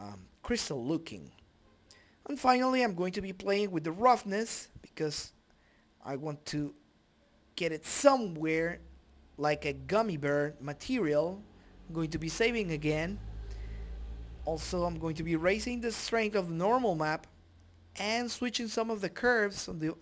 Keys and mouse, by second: 1.7 middle click, 4.6 click, 7.4 click, 16.4 click, 17.1 shift+a, 17.4 click.